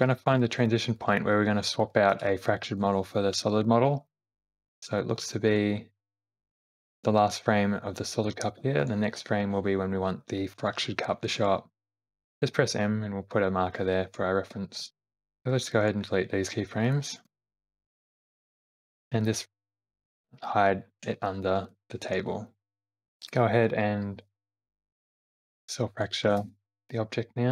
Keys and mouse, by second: 0.0 Right, 0.9 shift+middle click, 2.1 shift+middle click, 4.3 Left, 4.8 Right, 5.2 Left, 5.5 Right, 6.5 Left, 6.7 Right, 8.8 Right, 11.8 m, 14.8 Left, 15.4 Right, 15.4 ], 17.3 Delete, 17.4 Left, 17.4 Right, 17.9 Left, 18.2 Right, 18.4 Right, 19.6 click, 20.5 middle click, 21.0 g, 22.9 Left, 24.3 F3, 25.4 l.